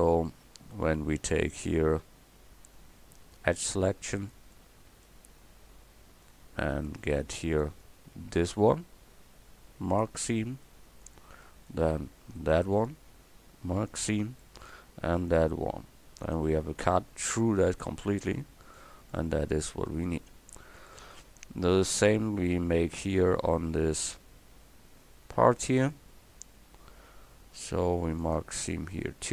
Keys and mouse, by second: 4.2 right click, 4.5 click, 4.7-6.7 middle drag, 6.7 click, 7.2-9.8 middle drag, 9.9 right click, 15.2-18.2 drag, 15.2-18.2 right drag, 24.3-28.2 middle drag, 28.2-29.3 drag.